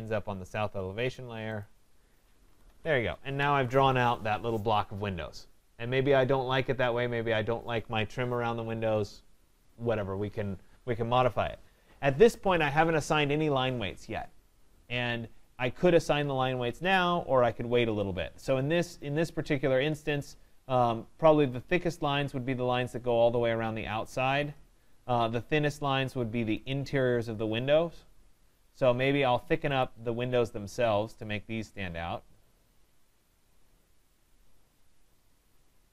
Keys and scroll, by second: 2.5 Escape.